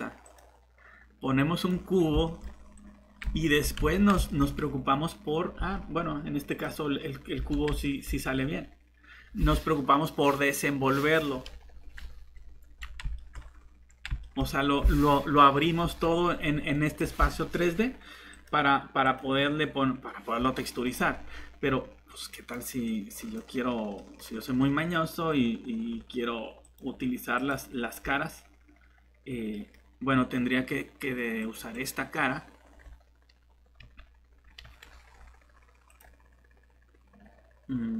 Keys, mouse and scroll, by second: 3.8 shift+Tab, 5.6 shift+Tab, 7.4 Tab, 33.8 shift+f, 34.6 g.